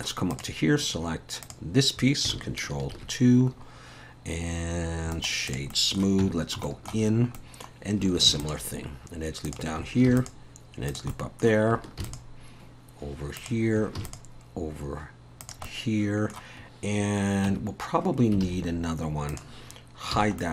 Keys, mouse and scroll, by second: 0.3 click, 1.4 click, 2.9 ctrl+2, 3.6-4.5 scroll up 2, 5.1 right click, 5.7 middle click, 6.2 Tab, 6.6 shift+middle click, 7.0 scroll up 1, 7.4 middle click, 8.3 ctrl+r, 10.1 ctrl+r, 11.1 middle click, 12.0 ctrl+r, 14.0 ctrl+r, 15.7 middle click, 17.0-17.5 scroll up 2, 17.5 Tab, 18.4 alt+a, 18.7 scroll down 1, 19.3 click, 20.1 h, 20.4 middle click.